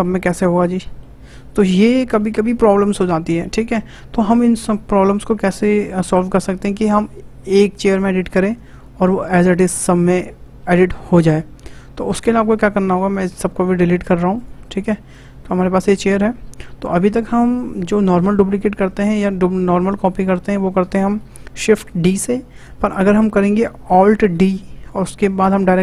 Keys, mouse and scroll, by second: 12.6 click, 13.9 Delete, 14.3 click, 15.1 click, 16.2-16.6 scroll up 2, 16.6-19.7 shift+middle drag, 24.3 alt+d.